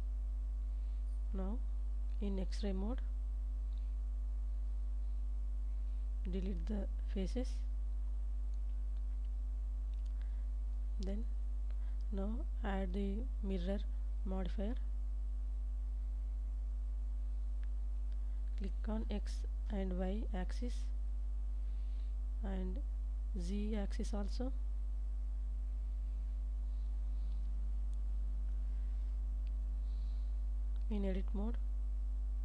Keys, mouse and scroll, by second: 0.1 Tab, 2.7 3, 3.4 alt+z, 4.9-6.0 drag, 7.5 shift+click, 9.0 x, 10.3 ctrl+s, 11.3 Tab, 12.0 alt+z, 13.4-16.5 drag, 18.4 click, 21.5 click, 22.9-24.3 middle drag, 25.6 click, 27.5 middle click, 29.1 KP_1, 32.0 Tab.